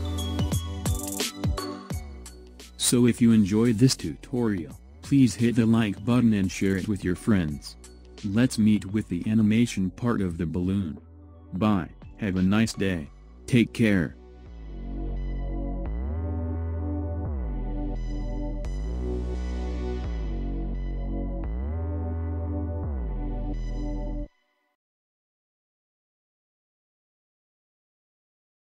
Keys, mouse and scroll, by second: 3.0-6.1 middle drag, 12.5 KP_1, 13.5-14.3 scroll up 4, 14.3 scroll down 1, 14.9-17.0 scroll down 1, 17.0-19.3 shift+middle drag, 19.3-19.8 scroll up 1, 20.8-27.3 ctrl+middle drag.